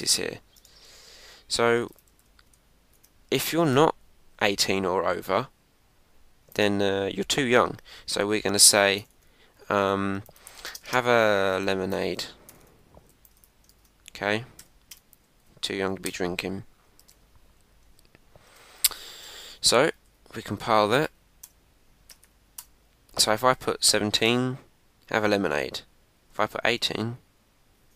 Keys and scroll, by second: 0.6 Tab, 3.6 shift+9, 13.7 shift+1, 15.2 Right, 17.0 super+s, 18.4 super+Tab, 19.8 Up, 21.0 Up, 21.4 Return, 22.1 Up, 22.6 Return.